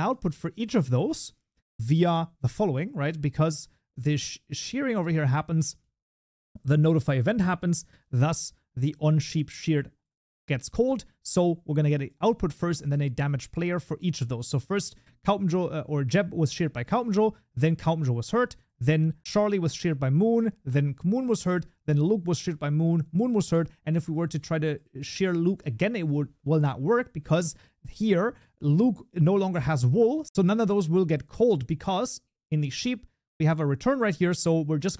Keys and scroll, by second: 1.8 Delete, 23.2 ctrl+d, 24.7 ctrl+s.